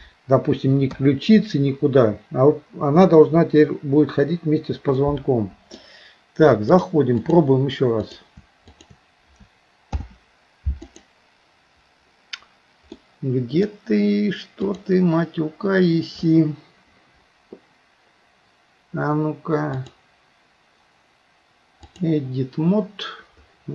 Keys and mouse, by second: 1.0 KP_3, 5.0 middle click, 6.8 click, 8.1 click, 8.8 shift+click, 9.9 ctrl+p, 13.0 middle click, 19.9-22.1 drag.